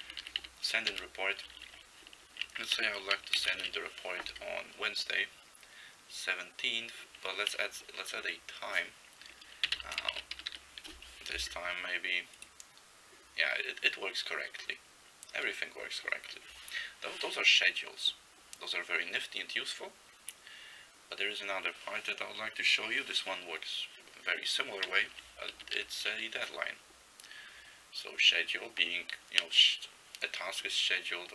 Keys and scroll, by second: 0.1 ctrl+n, 0.2 ctrl+n, 0.5 ctrl+n, 1.0 ctrl+n, 1.4 ctrl+a, 1.6 ctrl+a, 3.4 ctrl+c, 3.6 ctrl+s, 9.5-11.1 typing, 25.6 ctrl+n, 25.8 ctrl+n.